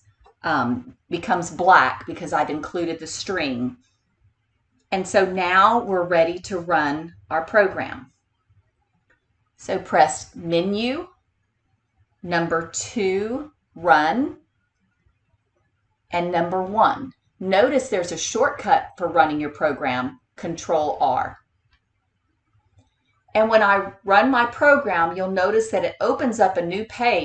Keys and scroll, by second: 10.1 Menu, 13.2 2, 21.4 Return.